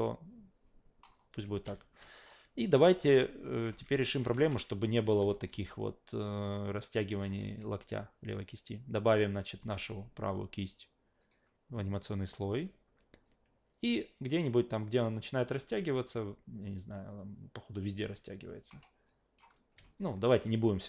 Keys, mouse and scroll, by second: 1.4 alt+v, 3.7 alt+v, 4.3 alt+v, 4.9-6.0 typing, 6.3 click, 7.4 ctrl+z, 9.0 click, 9.6 q, 11.2 right click, 12.3 click, 13.2-20.8 drag.